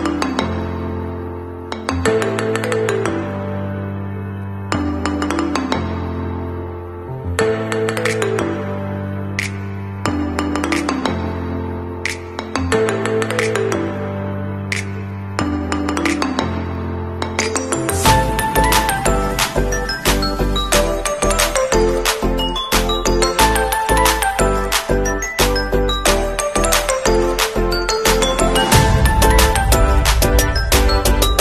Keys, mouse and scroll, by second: 0.0 scroll down 1, 1.9 shift+click, 2.8 alt+click, 4.2-4.7 alt+scroll down 2, 7.9-8.6 scroll up 3, 9.2 alt+scroll up 1, 9.5 click, 19.5 Right, 20.1 click, 25.2 ctrl+click.